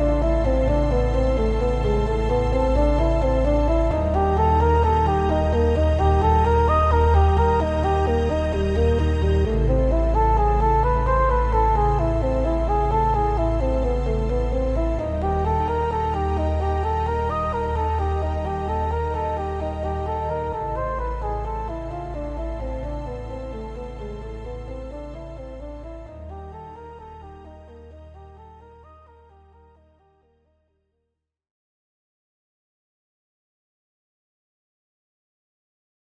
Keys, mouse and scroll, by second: 0.4 g, 0.8 right click, 1.1 click, 1.3 g, 2.1 shift+click, 2.3 f, 3.0 scroll down 1, 6.0 shift+drag, 6.5 f, 7.2-7.6 scroll down 1, 7.6 scroll up 1, 8.1-8.7 shift+middle drag, 8.7 click, 9.4 f, 9.7 click, 10.1 f, 11.7 shift+click, 12.0 shift+click, 12.4 f, 12.7-13.1 shift+middle drag, 13.1 click, 13.6 f, 14.0 click, 14.2 f, 14.8-16.4 scroll up 2, 15.0-16.4 shift+middle drag, 16.4 click, 17.0 x, 17.9 click, 18.2 shift+drag, 18.4 f, 18.9 click, 19.4 f, 19.7 click, 20.1 shift+click, 20.4 f, 20.5-20.9 scroll down 1, 21.2 click, 21.5 g, 22.7 shift+click, 22.9-23.7 right drag, 23.7 click, 23.8 g, 24.9 click, 25.1 shift+click, 25.4 f, 27.8 click, 28.4 f, 28.9 ctrl+z, 29.6 shift+click, 29.8 shift+drag, 30.0 f, 30.3 shift+middle click, 30.6 click, 30.8 f, 33.3 ctrl+z, 34.5 scroll up 1, 34.8-36.0 shift+middle drag, 35.1-35.5 scroll up 1.